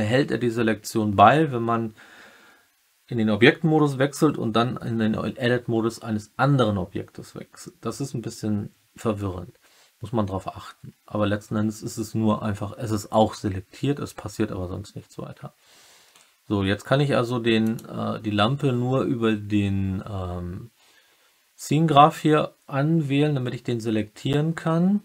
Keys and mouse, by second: 17.6 click.